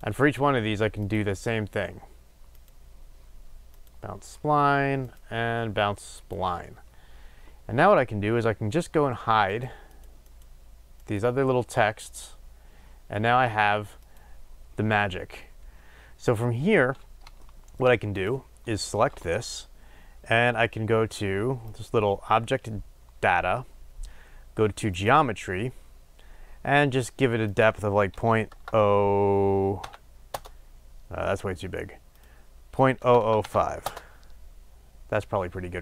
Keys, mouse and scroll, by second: 1.1-2.7 drag, 3.9 click, 6.3-9.6 drag, 9.9 drag, 10.2 click, 10.9 click, 17.4-18.2 shift+middle drag, 18.2 click, 30.3-35.8 drag, 30.4 Return, 33.8 KP_0, 33.9 Return.